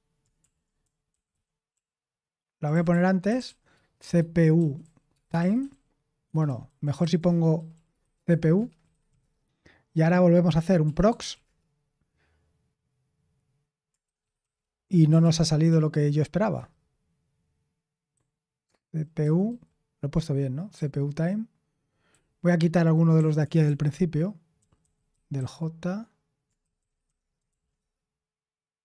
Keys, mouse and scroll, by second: 0.0-9.2 typing, 6.2 Escape, 10.6-11.8 typing, 13.8-14.9 typing, 15.2 ctrl+p, 15.7 ctrl+p, 16.5 Return, 18.1-19.2 typing, 22.1-27.5 typing, 27.7 Return.